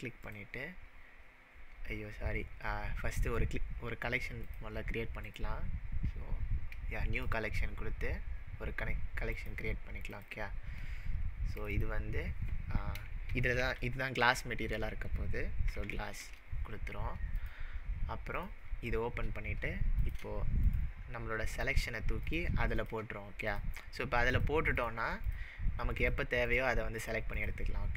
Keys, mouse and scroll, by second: 0.2 right click, 2.0-4.5 right drag, 4.4 click, 5.3-9.3 right drag, 7.2 click, 9.3 click, 10.1 click, 11.6 click, 11.8-14.8 drag, 13.0-14.2 typing, 15.7 s, 15.8 s, 16.2 Return, 17.4 click, 18.3 click, 20.0 click, 20.6 shift+click, 21.6 shift+click, 22.2 shift+click, 22.8 shift+click, 23.5 shift+click, 24.3 shift+click, 24.8 shift+click, 25.3 shift+click, 26.0 shift+click, 26.4 shift+click, 27.0 shift+click, 27.3 shift+click.